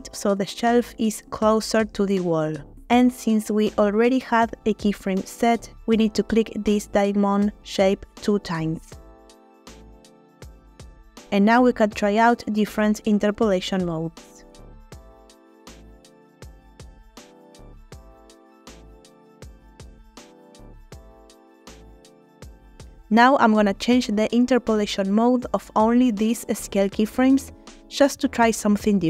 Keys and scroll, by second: 9.0 space, 11.6 space, 14.0 a, 20.7 space.